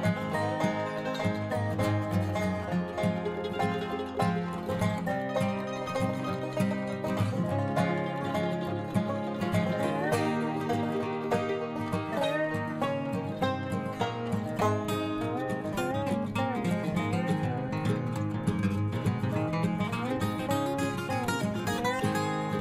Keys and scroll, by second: 7.9 ctrl+i, 18.5 ctrl+j, 21.0 ctrl+i.